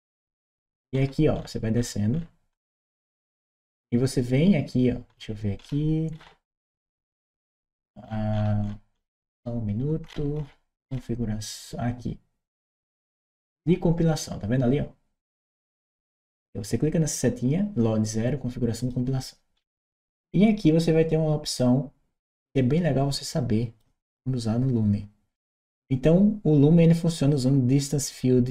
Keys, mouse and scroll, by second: 0.7-4.9 scroll down 1, 4.9-5.9 scroll down 1, 5.9-7.5 scroll up 1, 7.5-9.8 scroll down 1, 9.8-10.6 scroll down 1, 10.6-11.1 scroll down 1, 12.4 click, 18.6 click, 19.4-20.0 scroll down 1, 21.4-23.6 drag, 27.1-28.5 drag.